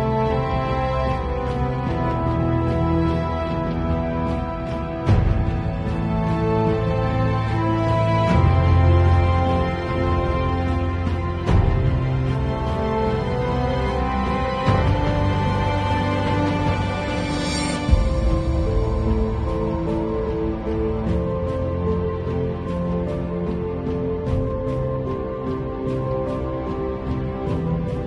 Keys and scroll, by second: 6.7 space, 24.9 space.